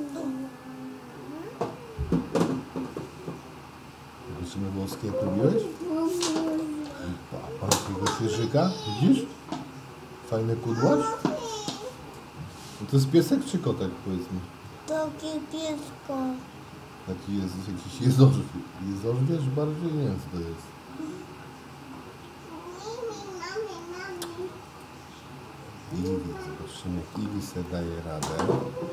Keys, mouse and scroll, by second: 27.9-28.9 middle drag.